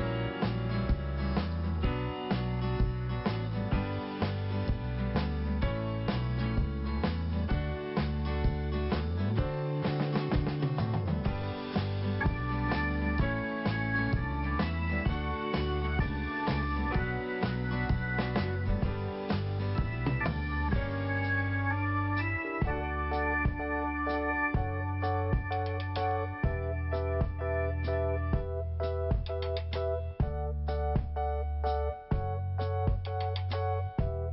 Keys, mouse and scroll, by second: 2.2 click, 3.0 scroll up 1, 4.8 click, 5.1 click, 12.3 click, 13.5 scroll up 1, 17.3 click, 17.4 click, 21.5-22.0 scroll down 1, 22.9 click, 24.0 click, 25.7 click, 26.8 click, 26.9 click, 28.1 click, 28.2 click, 28.9 click, 33.9-34.3 scroll down 1.